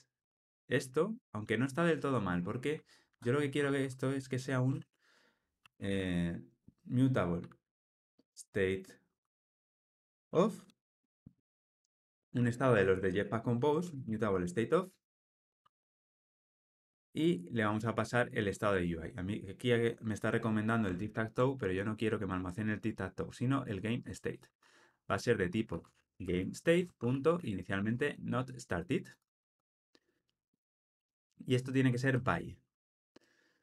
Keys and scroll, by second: 15.1 Return, 21.0 alt+], 26.8 Return.